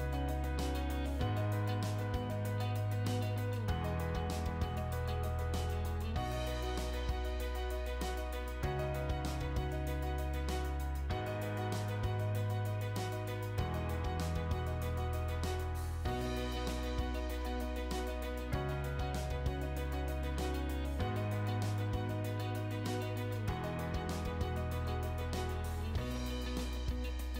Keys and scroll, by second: 3.6 p, 4.2 space, 5.9 space, 7.5 space, 8.5 space, 10.1 space, 11.7 space, 14.0 p, 14.3 space, 16.7 space, 18.4 r, 19.4 space.